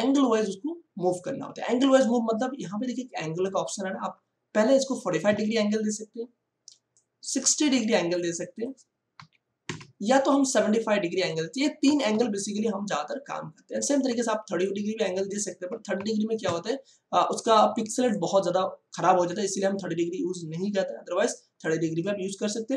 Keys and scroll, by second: 5.1 4, 5.2 5, 9.1 6, 9.7 0, 11.8 7, 12.1 5, 15.7 3, 16.4 0.